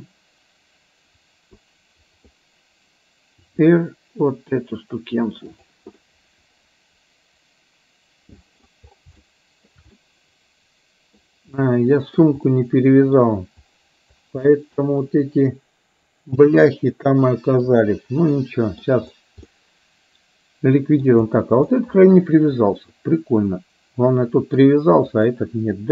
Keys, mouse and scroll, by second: 1.6 click, 3.6 r, 6.0-8.7 middle drag, 9.2 shift+middle click, 10.1-11.3 middle drag, 11.6 shift+middle click, 12.6 middle click, 14.5-17.8 middle drag, 18.5-18.8 middle drag, 19.6-21.1 middle drag, 21.7-24.6 middle drag, 25.2 click.